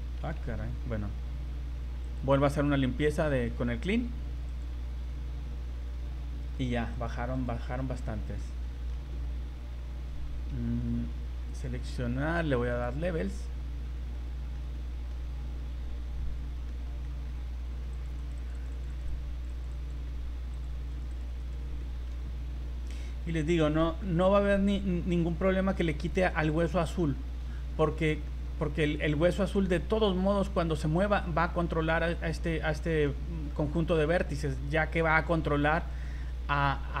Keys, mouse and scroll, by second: 0.1 a, 0.4 a, 2.0 click, 3.2-3.6 scroll down 10, 4.5 click, 6.4 right click, 7.0 right click, 7.4 right click, 7.9 middle click, 8.6 middle click, 11.5 click, 12.7 click, 14.1 middle click, 15.1 middle click, 17.0 middle click, 17.4 scroll up 2, 17.9 click, 18.3 click, 18.5 click, 18.7 click, 18.9 click, 19.1 click, 19.3 click, 19.6 click, 19.8 click, 20.0 middle click, 20.5 click, 21.0 click, 21.1 click, 21.4 click, 21.8 middle click, 23.0-23.3 scroll down 5, 23.4 middle click, 24.0 scroll up 1, 24.0 middle click, 24.6-25.0 scroll up 3, 33.0 middle click, 34.8 v, 35.3 right click, 35.9 right click.